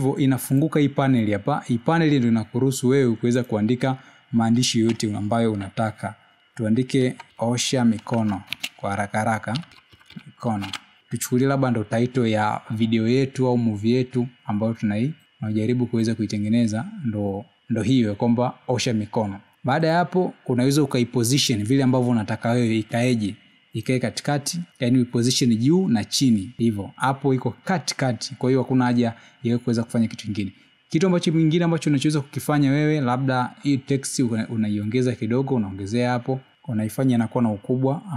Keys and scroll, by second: 5.8 Caps_Lock, 7.3 a, 7.3 space, 8.4-9.9 typing.